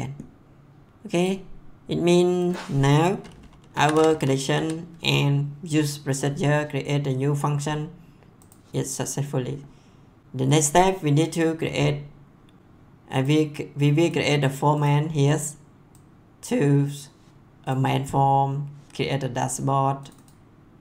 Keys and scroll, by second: 3.5-5.1 typing.